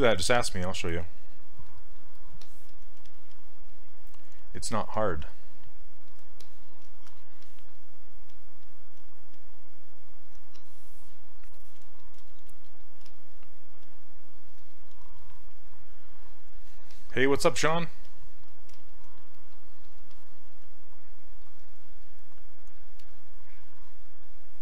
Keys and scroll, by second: 3.0 s, 13.0 s.